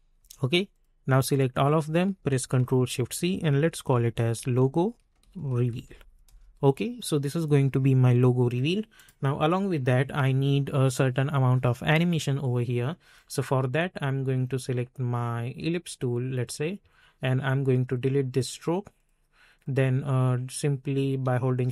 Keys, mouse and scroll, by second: 0.7-2.5 drag, 2.5 ctrl+shift+c, 3.3-6.3 typing, 8.9 click, 13.1-16.4 drag, 16.4-21.7 drag.